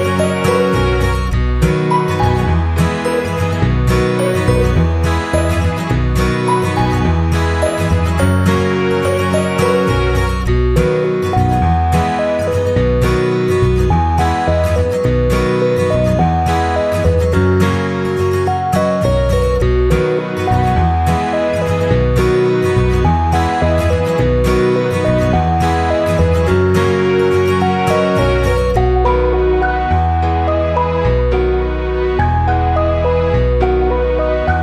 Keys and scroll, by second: 3.3 Delete, 8.7 Up, 11.4 ctrl+[, 13.0 ctrl+0.